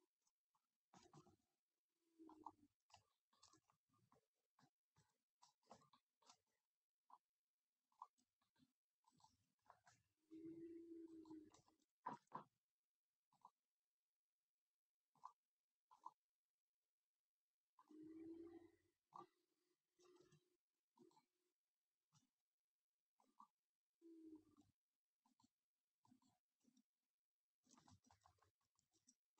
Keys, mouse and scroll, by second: 1.2 r, 4.2 ctrl+c, 5.0 ctrl+shift+v, 8.0-10.1 drag, 9.1 right click, 9.8 ctrl+Tab, 10.1 right click, 11.2-12.9 right drag, 13.4-19.9 drag, 19.9 middle click, 21.1-23.2 right drag, 23.2-25.4 drag, 24.4-28.0 right drag, 28.0 ctrl+z, 28.2 ctrl+z, 28.4 ctrl+z, 28.5 ctrl+z, 28.7 ctrl+z.